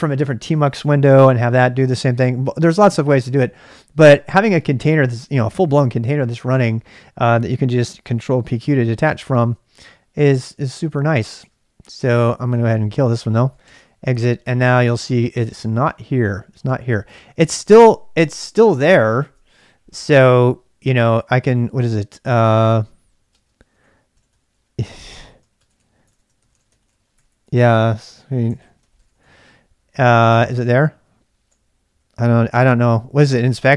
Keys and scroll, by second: 8.4 ctrl+p, 8.5 ctrl+q, 10.7 ctrl+[, 10.8 k, 11.3 Return, 12.6 ctrl+c, 12.9-15.0 typing, 14.8 ctrl+[, 15.7 Return, 17.4 ctrl+[, 17.5-19.5 typing, 22.3-33.2 typing, 26.1 Return.